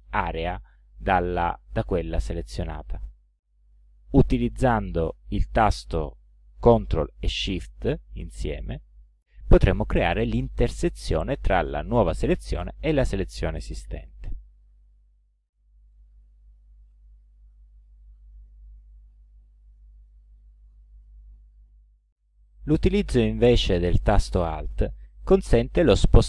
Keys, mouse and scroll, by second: 8.6-10.1 ctrl+shift+drag, 16.9 ctrl+z, 19.6 ctrl+z.